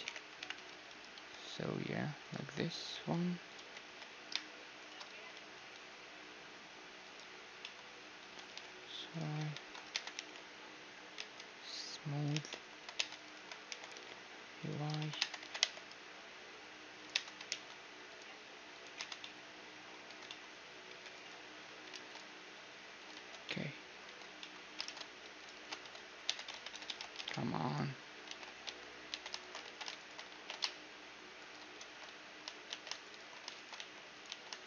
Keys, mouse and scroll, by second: 0.0 KP_Divide, 0.5 KP_1, 0.7 z, 1.5 s, 2.7 z, 3.0 s, 3.5 z, 3.8 g, 5.1 z, 5.6 s, 7.6-9.8 middle drag, 8.2 s, 9.5 ctrl+3, 9.9 Tab, 10.1 t, 11.2 Tab, 12.2-14.5 drag, 12.3 t, 12.5-15.0 right drag, 13.0 Tab, 13.2-16.9 middle drag, 13.8 e, 15.2 Tab, 15.4 g, 17.1 Tab, 17.5 ctrl+r, 19.0 Tab, 19.2-22.5 middle drag, 20.3 Tab, 20.9 g, 21.9 ctrl+r, 23.1 Tab, 24.1 Tab, 24.1-28.0 middle drag, 24.8 ctrl+Tab, 25.5 ctrl+x, 26.1 Tab, 26.5 Tab, 26.5-26.9 ctrl+z, 27.2 ctrl+Tab, 28.3 ctrl+x, 28.6 Tab, 29.1 Tab, 29.4-31.8 right drag, 29.6 ctrl+x, 30.3 ctrl+b, 31.8 ctrl+z, 32.7 z, 33.0-34.6 right drag, 33.8 x, 34.3 z.